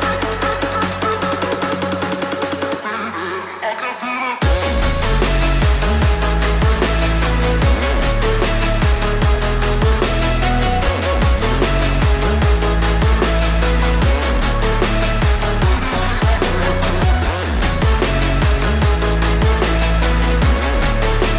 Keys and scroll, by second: 19.9 ctrl+z.